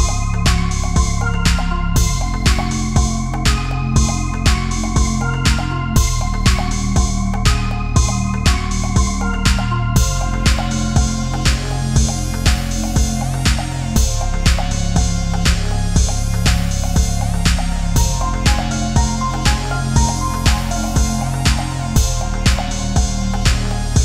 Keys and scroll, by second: 1.1 space, 6.5 Delete, 8.1 space, 13.4 ctrl+z, 17.5 Left, 20.0 ctrl+=, 21.7 ctrl+z, 23.5 space.